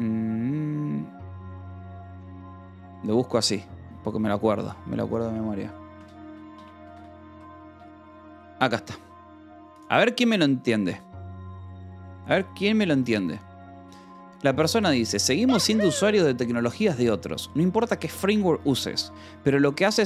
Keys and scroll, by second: 3.1 /, 5.6-7.8 typing.